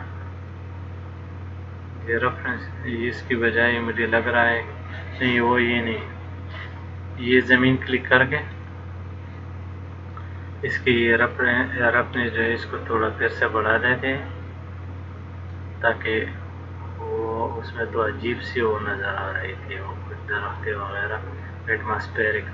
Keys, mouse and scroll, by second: 1.3 click, 7.4 click, 8.8 click, 11.2 click, 12.4 click.